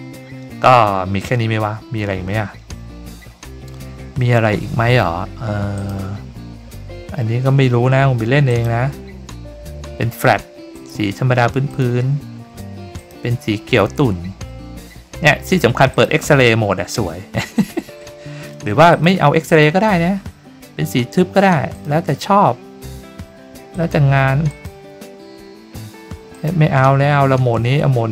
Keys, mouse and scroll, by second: 5.7 click, 8.4 click, 10.7 click, 11.6 click, 12.9 click, 15.9 click, 18.9 click, 19.4 click, 21.7 click, 23.7 click, 24.4 click, 26.3 click.